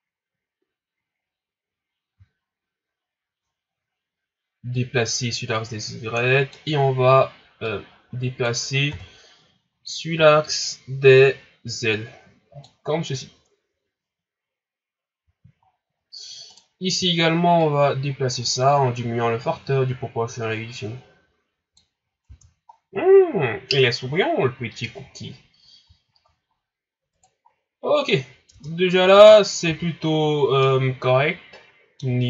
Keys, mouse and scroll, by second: 4.7-8.9 drag, 8.9 KP_1, 9.7 scroll down 4, 10.2-10.6 scroll up 5, 11.9-14.9 drag, 15.6 scroll down 5, 16.0 scroll up 4, 16.5 right click, 17.6-20.6 drag, 21.9 scroll down 2, 22.2 Tab, 22.7 scroll down 5, 23.4 scroll up 6, 25.7 scroll down 2, 26.2-26.6 shift+scroll up 4, 27.1 right click, 27.5 scroll down 3, 28.1 scroll up 2, 28.5 Tab, 29.1 scroll down 1, 29.6 a, 29.8 scroll down 3, 30.6-32.2 middle drag.